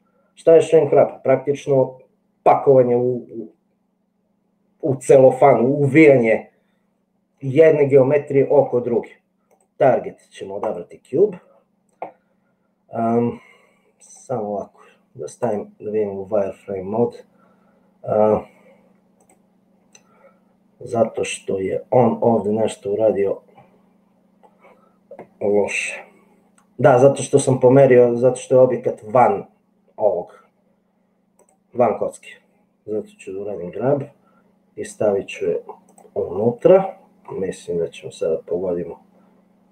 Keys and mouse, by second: 9.7-11.0 drag, 19.3 click, 34.1 g, 36.5-37.5 middle drag, 37.9 g.